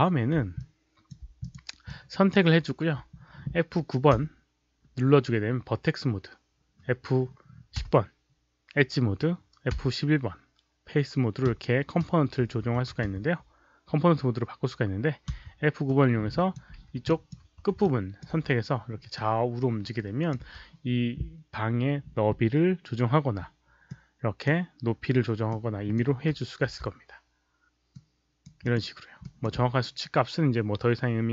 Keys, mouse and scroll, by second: 0.5 alt+click, 1.3 click, 1.8 click, 4.1 F9, 7.7 F10, 9.7 F11, 11.4 F9, 12.0 F10, 12.4 F9, 13.0 F9, 15.3 F9, 15.8-16.5 drag, 17.0 alt+click, 17.4 4, 17.8 alt+click, 19.1-20.2 drag, 20.3 z, 23.8 click, 25.4-25.9 drag, 26.6 z, 27.8-28.4 right drag, 28.6 click, 28.6 z, 29.1 click.